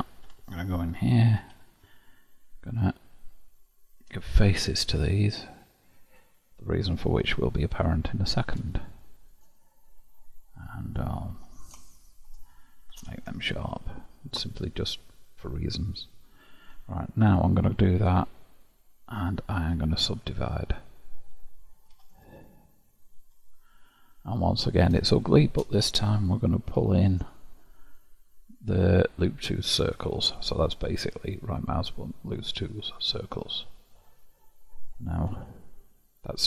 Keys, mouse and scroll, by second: 0.2 Tab, 1.4 2, 2.6 alt+click, 4.0 f, 4.4-6.1 middle drag, 6.1 alt+click, 7.1 f, 7.6-11.4 middle drag, 11.4 3, 11.8 shift+click, 13.0 ctrl+', 14.0-17.1 middle drag, 17.3-20.2 right drag, 22.1 click, 23.2 KP_1, 23.8-24.4 scroll up 1, 24.4-25.1 scroll up 5, 25.1-26.6 shift+middle drag, 26.6 ctrl+w, 28.8-29.9 middle drag, 29.9 click, 31.1-33.6 right drag, 33.6-35.3 middle drag, 35.3 KP_1.